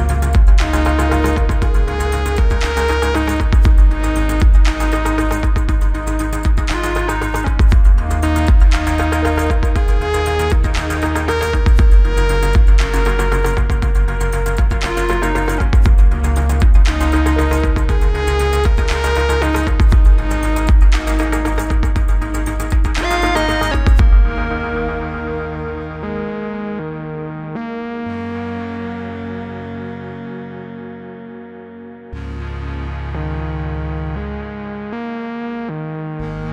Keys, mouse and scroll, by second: 0.6 click, 4.7-5.1 click, 5.0-6.6 typing, 7.5-9.2 click, 11.1 click, 11.9 Return, 14.1 click, 16.2 Return, 19.7-20.2 click, 21.7 click, 23.3 u, 24.2-25.5 click, 32.0-33.1 click, 36.0 alt+Num_Lock.